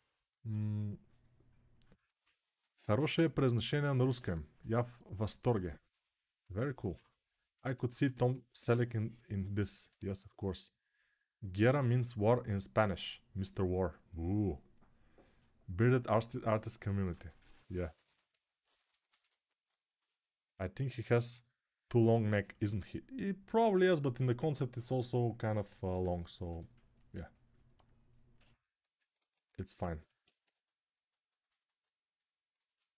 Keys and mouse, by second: 22.1-29.5 alt+drag, 29.2 alt+q, 30.2 g.